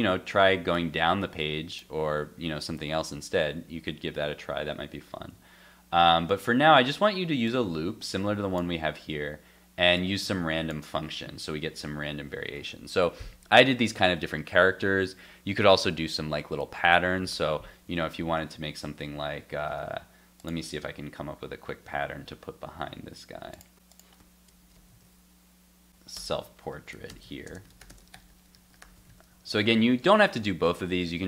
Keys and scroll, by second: 0.0 alt+Tab, 4.8 alt+Tab, 17.9 super+Tab, 24.9 super+s, 29.1 super+s, 31.1 super+s.